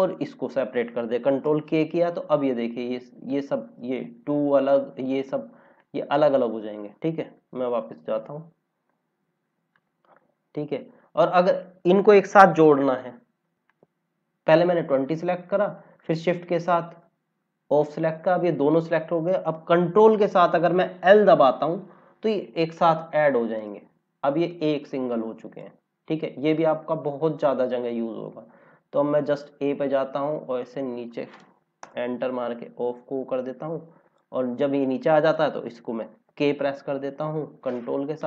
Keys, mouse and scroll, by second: 1.4 ctrl+k, 3.2 click, 7.3 ctrl+z, 7.7 ctrl+z, 8.1 ctrl+z, 9.6 click, 10.0 scroll down 1, 12.0 scroll up 1, 13.5 click, 16.8 click, 21.0 ctrl+l, 23.6 click, 29.2 click, 32.1 Return, 34.0 click, 36.0 ctrl+k.